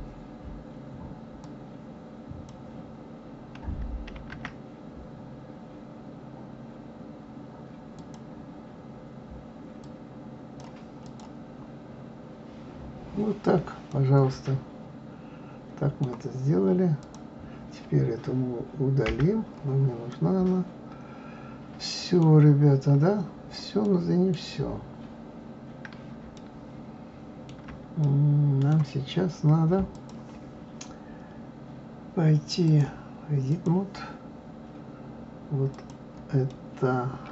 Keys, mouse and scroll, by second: 1.4-4.2 drag, 4.2 shift+d, 9.8-11.1 drag, 11.5-12.7 scroll down 6, 12.7-13.6 scroll up 2, 13.9-16.9 middle drag, 17.0 click, 19.1 Delete, 20.1-22.6 middle drag, 22.6-23.1 scroll up 3, 23.1-23.6 scroll down 4, 23.8-25.1 middle drag, 25.1 scroll up 2, 26.3-29.9 shift+middle drag, 29.9 click, 32.6-35.6 drag, 35.7 click, 36.5-37.3 middle drag.